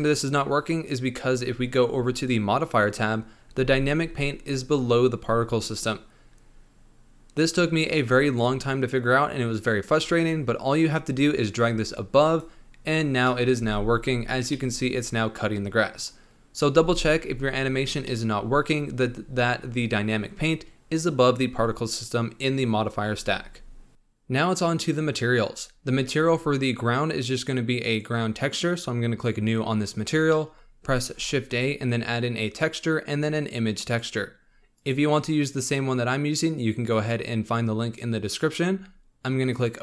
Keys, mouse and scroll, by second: 12.7 click, 13.2-13.6 middle drag, 13.6 space, 14.7-17.0 middle drag, 17.0 space, 18.0-24.0 middle drag, 27.8-29.9 drag, 29.9 scroll up 1, 30.2-31.0 middle drag, 31.0 shift+a, 36.9 click, 38.6-39.4 scroll up 1, 39.4 click.